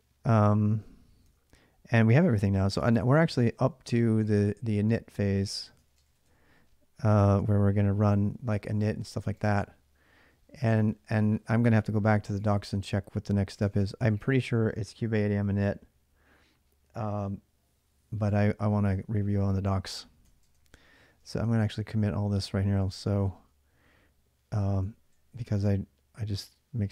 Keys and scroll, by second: 1.0 Tab, 3.1 ctrl+[, 3.1 ctrl+j, 3.3 k, 5.1-6.4 typing, 7.2 alt+Tab, 12.1 ctrl+[, 12.3-14.3 typing, 20.0-22.9 typing, 24.8 ctrl+a, 25.1 ctrl+a.